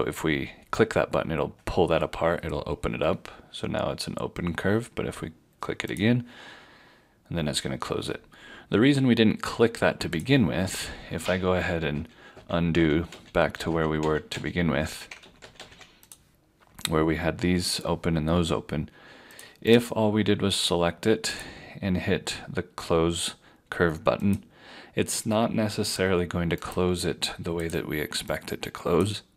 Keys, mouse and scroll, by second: 10.2 click, 11.1 ctrl+z, 11.9 ctrl+z, 12.4 ctrl+z, 12.8 ctrl+z, 13.1 ctrl+z, 13.7 ctrl+z, 14.0 ctrl+z, 14.3 ctrl+z, 15.2 ctrl+z, 15.4 ctrl+z, 15.6 ctrl+z, 19.3 ctrl+z, 19.7 click.